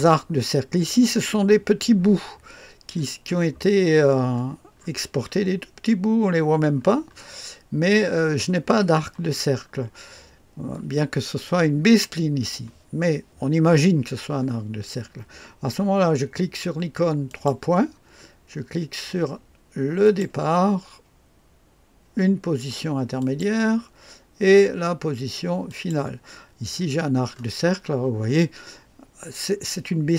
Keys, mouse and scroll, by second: 3.3-6.8 scroll up 1, 6.8-9.6 scroll down 2, 9.6-10.2 scroll down 1, 10.2 middle click, 17.3 click, 20.0 click, 23.2 click, 25.7 click, 26.7-28.4 scroll up 1.